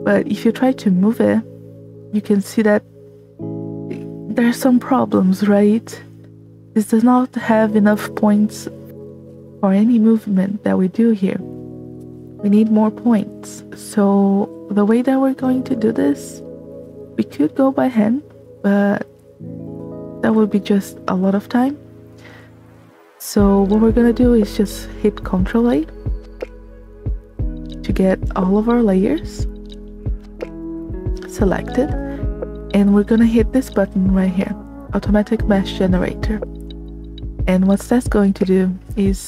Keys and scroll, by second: 23.2 space, 29.2 a, 29.3 space.